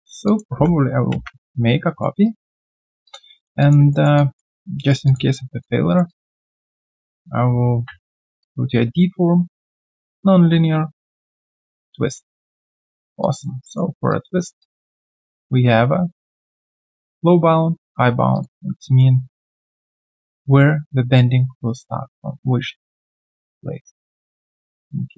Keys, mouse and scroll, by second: 0.2 alt+click, 0.8 w, 1.1 ctrl+d, 2.2 alt+right click, 2.5 alt+click, 3.0 alt+click, 3.3 alt+middle click, 3.6 alt+click, 3.9 alt+middle click, 4.1 alt+click, 4.8 alt+right click, 5.0 alt+click, 5.6 alt+click, 5.9 alt+right click, 6.1 alt+click, 12.5 alt+click, 12.9 alt+right click, 13.2 alt+click, 13.6 alt+middle click, 14.6 alt+click, 19.0 middle click.